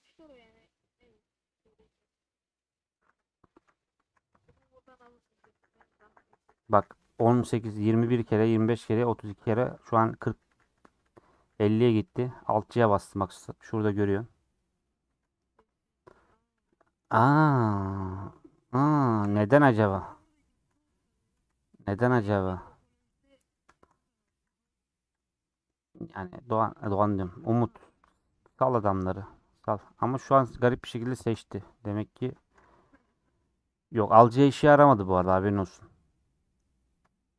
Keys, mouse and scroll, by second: 3.6 a, 4.5-7.3 alt+j, 8.2 alt+j, 9.7-11.9 |, 15.6-19.4 middle drag, 19.4 2, 20.0 click, 20.6 ctrl+x, 21.4 ctrl+z, 21.8 scroll down 3, 22.0 middle click, 22.2-22.7 scroll up 4, 22.7 3, 23.1 click, 23.2-23.8 scroll up 2, 23.2 middle click, 23.8 middle click, 24.1 scroll down 2, 24.2 a, 25.6 middle click, 26.1 scroll up 2, 26.3 middle click, 27.0 scroll down 1, 28.0 alt+click, 28.2 scroll down 4, 28.6-29.7 middle drag, 29.7 scroll up 2, 29.9-31.5 middle drag, 31.5-32.1 scroll up 2, 32.1 scroll down 3, 34.8-35.2 scroll down 3, 35.8 click, 36.4-37.3 middle drag.